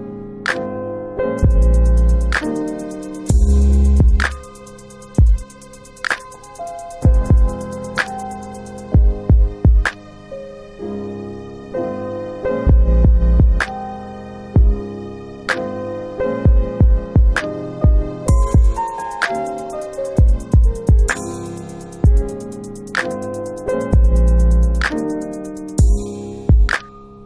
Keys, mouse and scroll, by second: 0.5 alt+click, 0.8 alt+right click, 0.9 alt+right click, 1.2 alt+click, 2.8 click, 3.1 alt+click, 3.3 alt+click, 3.8 shift+right click, 6.8 shift+right click, 7.3 alt+click, 7.5 alt+click, 7.8 alt+right click, 8.3 alt+right click, 8.7 alt+click, 10.3 alt+click, 10.7 alt+middle click, 11.0 alt+middle click, 11.3 alt+right click, 12.1 alt+right click, 12.4 alt+click, 13.2 alt+click.